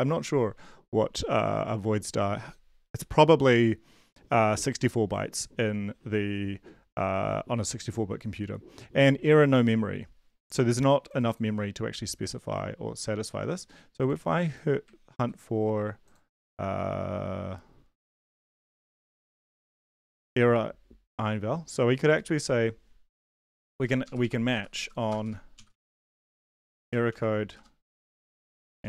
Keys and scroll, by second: 15.1 ctrl+c, 19.5 ctrl+v, 23.2 Left, 23.4 Up, 23.6 Down, 24.0 Up, 24.2 Up, 24.5 Down, 24.7 Left, 25.1 Return, 25.2 Return, 25.3-28.8 typing.